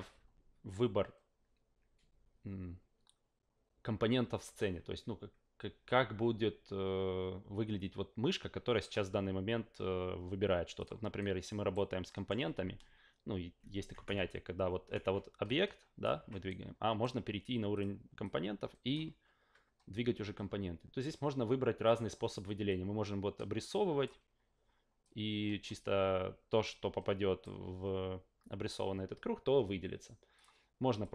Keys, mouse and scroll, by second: 10.8 click, 11.2-11.7 right drag, 12.0 alt+middle click, 13.9 F8, 14.0 F8, 15.0 w, 15.4 click, 16.2 ctrl+z, 16.5-17.0 right drag, 17.7 click, 18.2-18.9 drag, 19.1 ctrl+z, 21.8 click, 22.7-24.0 drag, 25.0 click, 26.6 click, 30.3 click, 31.0 click.